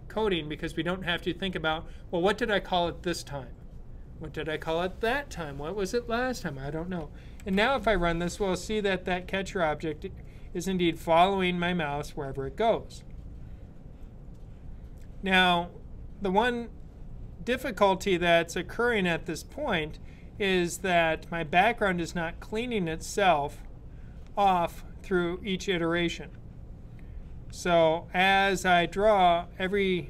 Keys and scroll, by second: 7.2 super+b.